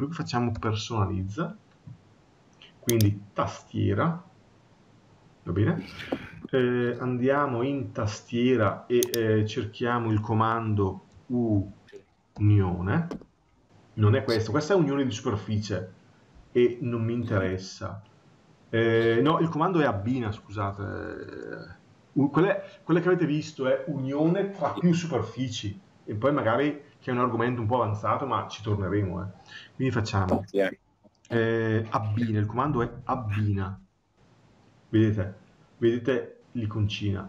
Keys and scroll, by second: 19.9 BackSpace.